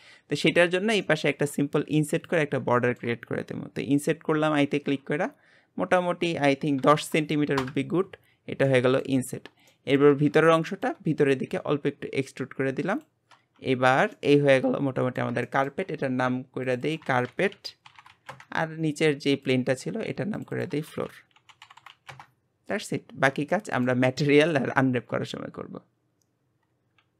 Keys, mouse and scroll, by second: 0.5-1.0 scroll up 3, 1.0-2.2 shift+middle drag, 2.2 click, 2.7 shift+middle click, 3.3 scroll up 1, 4.0 scroll up 1, 8.3-8.7 scroll down 5, 8.7 middle click, 9.2-9.7 scroll up 4, 9.7 shift+middle click, 10.1-10.4 scroll up 2, 10.4 shift+middle click, 11.3 e, 13.3 Tab, 13.7 scroll down 3, 14.1-16.6 middle drag, 16.6 click, 16.8-19.5 drag, 20.3 click, 20.5-21.8 drag, 21.8 o, 23.1 scroll down 4, 23.5-26.7 shift+middle drag.